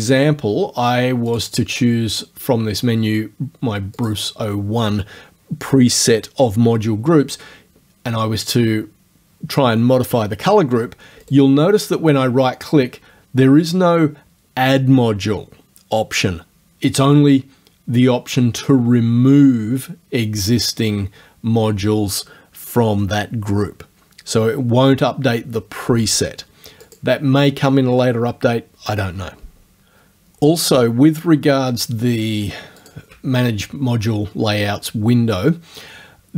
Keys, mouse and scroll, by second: 0.0 click, 1.4 click, 4.0 click, 11.3 right click, 26.9 click, 32.9 ctrl+click.